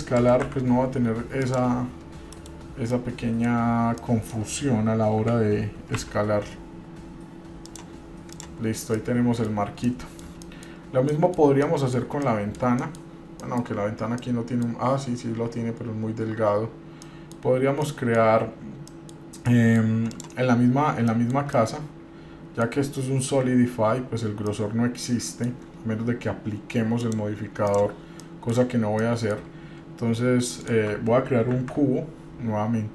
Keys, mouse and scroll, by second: 0.4 s, 2.5 KP_Divide, 3.1-3.6 middle drag, 3.8 scroll up 2, 4.2 middle click, 5.4 g, 8.5 click, 8.9 scroll down 2, 9.1-9.7 middle drag, 9.8 scroll down 1, 10.0 middle click, 10.6 shift+middle drag, 11.0 scroll up 1, 11.3 middle drag, 11.8-12.3 shift+middle drag, 12.4 middle click, 13.0 shift+middle click, 13.6 middle click, 14.1 scroll up 2, 14.4 shift+middle click, 17.2 middle click, 17.7-18.0 scroll up 1, 18.0 middle click, 18.6-19.1 scroll up 1, 19.1 middle click, 19.5 scroll up 1, 19.7 middle click, 20.3 click, 21.3 middle click, 21.5 scroll down 2, 21.7-22.9 middle drag, 24.7-25.8 middle drag, 27.2 click, 28.4 middle click, 29.0-29.5 shift+middle drag, 30.9 shift+right click, 31.7 shift+a.